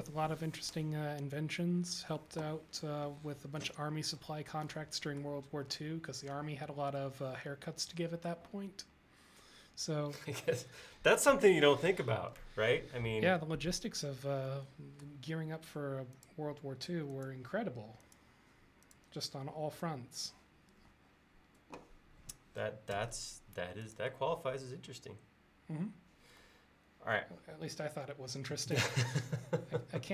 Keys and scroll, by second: 12.2 l, 23.0 space.